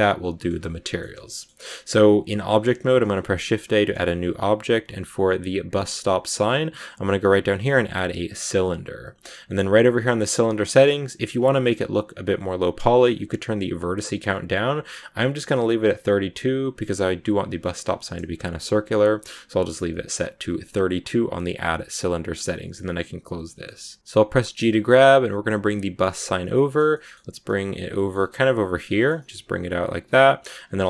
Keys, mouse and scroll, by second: 2.9 shift+a, 9.7 click, 10.6 scroll up 4, 11.2 scroll up 3, 12.9-14.1 drag, 23.1 click, 23.5 shift+middle click, 24.4 g, 26.1-27.3 middle drag, 27.3 g, 27.7 scroll down 1, 27.8 middle click, 28.0 scroll up 1, 28.1 g, 28.7 middle click, 29.0 g, 30.4-30.7 scroll up 1, 30.7 Tab.